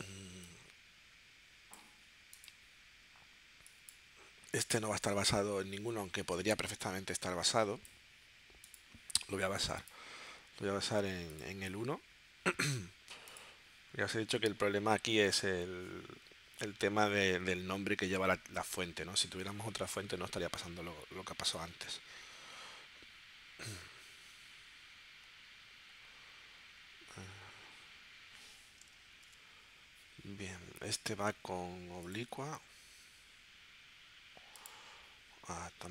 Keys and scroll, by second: 29.1 shift+super+p.